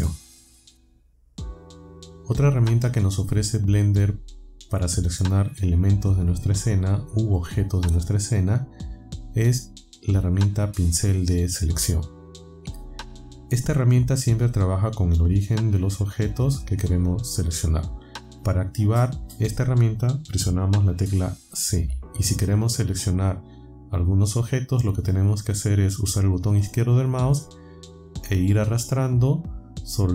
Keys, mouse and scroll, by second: 21.8 c, 28.9-30.1 drag.